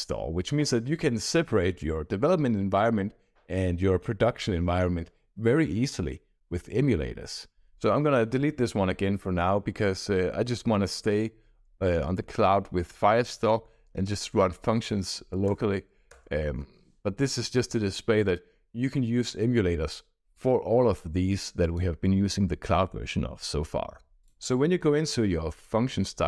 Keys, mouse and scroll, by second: 15.4 BackSpace, 16.0 BackSpace, 20.2 click, 21.5 click, 24.2 click.